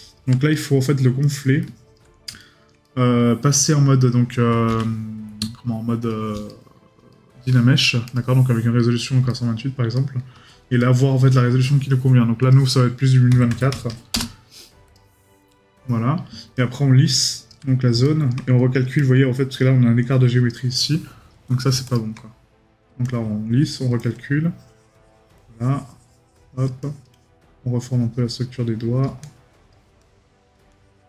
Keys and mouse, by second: 0.5 right click, 2.4 right click, 5.4 right click, 9.3 right click, 18.0 right click.